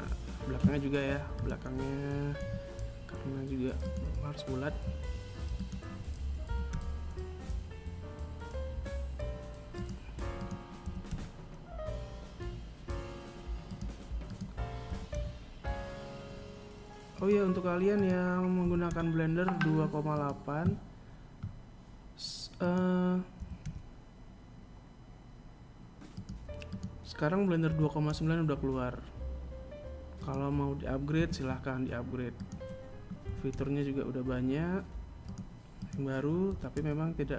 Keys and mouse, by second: 0.5 right click, 1.5 KP_3, 3.0 right click, 4.8 right click, 5.7 g, 9.6 right click, 10.0 g, 12.7 right click, 13.3 g, 16.4 right click, 17.0 g, 21.0 right click, 21.8 g, 25.1 right click, 26.1 g, 29.5 a, 30.7 right click, 31.5 g, 34.1 right click, 34.8 g.